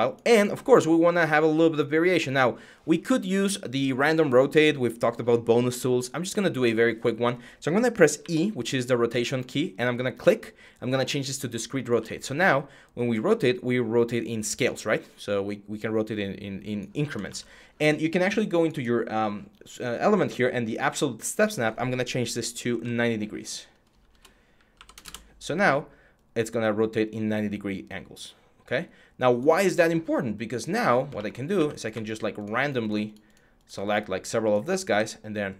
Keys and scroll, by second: 8.0 e, 8.5 e, 8.6-11.6 e, 17.0 ctrl+z, 22.5 9, 23.7-25.2 typing, 31.3 q, 34.6 e.